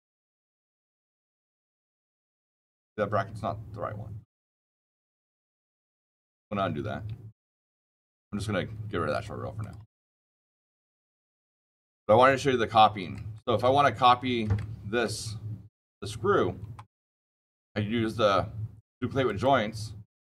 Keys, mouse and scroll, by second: 1.1 shift+middle click, 2.5-4.3 shift+middle click, 2.9 shift+middle click, 3.0 shift+middle click, 6.5 ctrl+z, 7.3 ctrl+z, 9.0 click, 9.5 click, 11.1 click, 12.1-13.1 shift+scroll, 13.3 click, 14.0 shift+middle click, 14.1 shift+middle click, 14.2 shift+middle click, 14.5 shift+middle click, 16.2 scroll down 5, 17.4 click, 19.2 click.